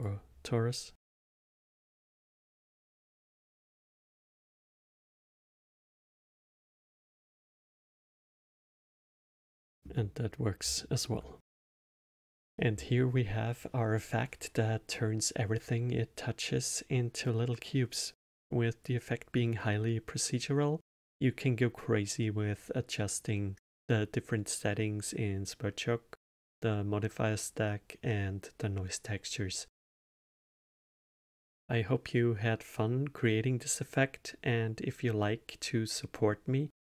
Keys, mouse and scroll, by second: 0.0 shift+a, 2.0 click, 4.0 click, 7.1 click, 7.7 alt+middle click, 8.2 space, 9.0-12.5 alt+middle drag.